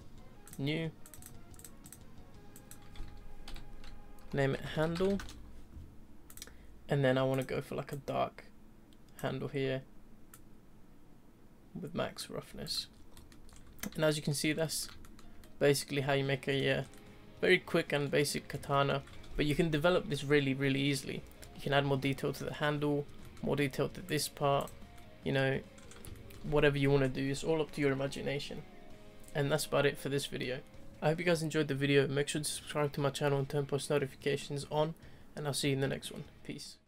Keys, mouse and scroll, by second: 6.5 click, 7.3-7.9 drag, 10.4-12.7 drag, 12.9 scroll down 2, 13.1-13.5 middle drag, 13.8 scroll down 2, 14.1-16.7 shift+middle drag, 16.7 scroll up 2, 16.9-18.0 middle drag, 18.0 scroll down 1, 18.2-24.1 middle drag, 24.1 click, 24.6 click, 24.9-25.7 shift+middle drag, 25.7-26.1 scroll down 2, 26.1-36.8 shift+middle drag.